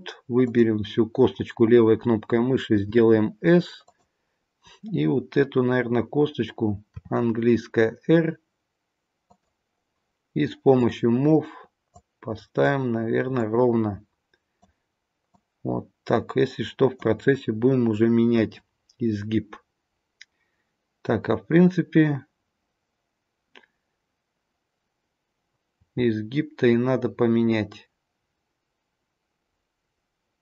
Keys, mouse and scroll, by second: 0.4 click, 2.7 s, 6.9 r, 10.7 click, 12.0 click, 15.2 click, 25.8 r.